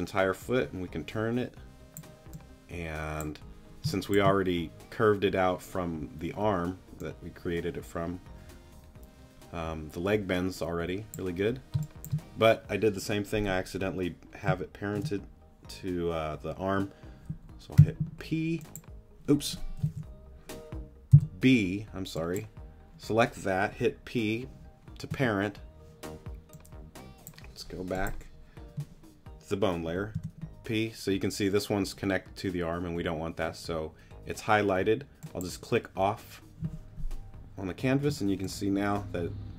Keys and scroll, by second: 3.8 space, 11.7 space, 17.8 p, 19.9 super+z, 21.1 b, 25.1 p, 30.1 p, 38.1 z.